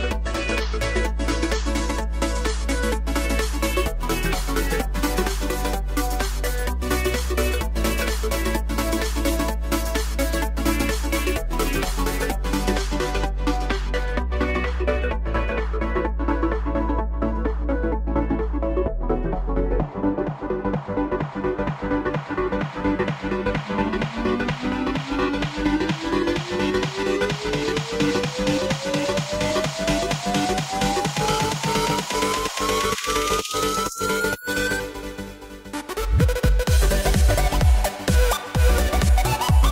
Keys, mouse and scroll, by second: 0.1-0.8 shift+middle drag, 0.8 drag, 1.0 middle click, 1.3 click, 1.6-2.4 middle drag, 2.4-4.2 scroll up 2, 4.2-7.0 shift+middle drag, 7.0 click, 8.1 shift+a, 9.8 shift+a, 11.4-11.9 scroll down 5, 11.9-15.5 middle drag, 15.8 ctrl+alt+KP_0, 17.0 click, 17.7-21.5 drag, 21.9-22.7 drag, 22.7-23.1 scroll down 3, 23.5 g, 26.2-28.3 drag, 28.3-28.8 scroll up 1, 28.8 g, 31.2 scroll down 1, 31.4-31.7 middle drag, 31.7 scroll up 1, 31.8 scroll down 2, 32.1 click, 32.7 shift+click, 33.5 shift+click, 34.2 m, 36.0 KP_Enter, 37.1 click, 37.7 click, 37.9 scroll up 3, 38.2 drag, 38.4 z, 39.4 KP_1.